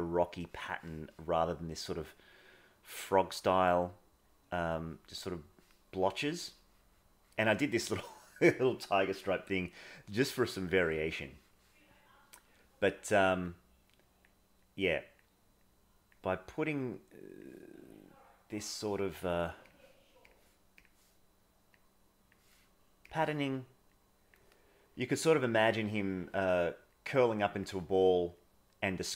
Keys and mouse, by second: 0.7 middle click, 5.9 middle click, 6.6 middle click, 8.0 middle click, 10.7 middle click, 11.2 middle click, 13.5 click, 14.6 click, 15.5 click, 16.4 click, 17.1 click, 18.1 click, 19.6 click, 20.2 click, 21.8 click, 23.9 click, 25.0 click, 26.9 click, 27.5 click, 28.4 click.